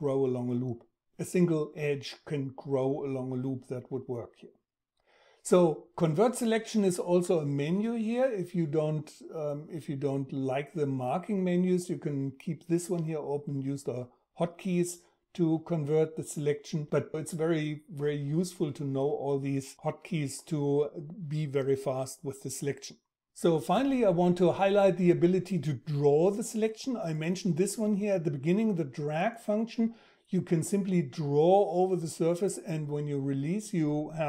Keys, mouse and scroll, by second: 30.9 Tab.